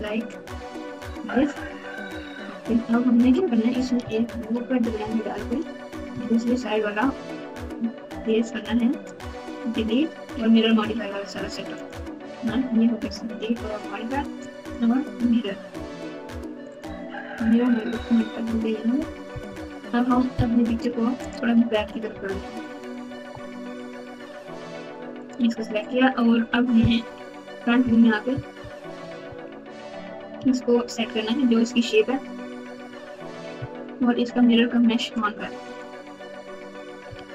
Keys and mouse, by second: 3.2 Tab, 4.3 ctrl+r, 6.2 alt+z, 7.5 click, 9.0-10.0 drag, 10.7 x, 12.4 Tab, 14.7-17.4 drag, 16.7 right click, 19.4 KP_8, 21.2 click, 21.9 g, 23.4 alt+z, 25.2 click, 25.4 Tab, 27.0 KP_1, 28.5 ctrl+KP_Subtract, 28.9 ctrl+KP_Subtract, 29.5 ctrl+KP_2, 29.8 ctrl+KP_2, 29.9 ctrl+KP_2, 29.9 ctrl+KP_2, 33.5 a, 35.6 click, 37.1 alt+z.